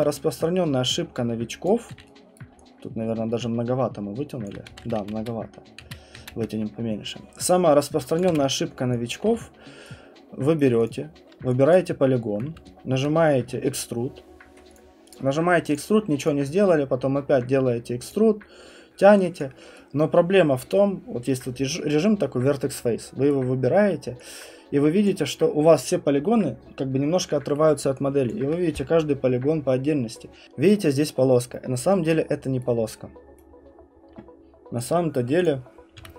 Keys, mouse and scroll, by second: 1.6 click, 1.9 q, 2.2 right click, 2.3 right click, 4.4 alt+click, 4.9 ctrl+z, 5.0 ctrl+z, 5.2 ctrl+z, 5.8 ctrl+z, 6.2 ctrl+z, 7.5 click, 7.7 scroll, 8.2 alt+click, 8.3 w, 9.1 click, 9.2 f, 10.6 right click, 10.9 click, 11.0 middle click, 11.4 middle click, 11.7 click, 14.7 click, 15.1 click, 15.7 click, 16.2 click, 18.1 click, 19.4 click, 23.3 right click, 23.7 middle click, 23.8 middle click, 25.0 alt+click, 32.6 right click, 33.4 right click, 34.8 click, 35.4 click, 35.6-36.1 scroll, 36.0 w.